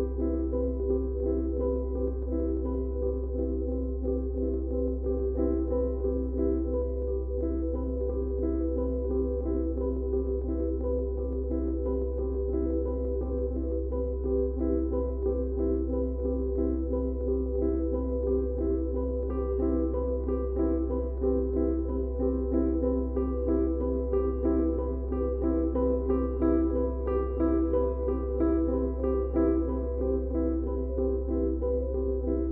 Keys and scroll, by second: 12.9 e, 21.1 ctrl+z, 23.9 e, 29.0 e.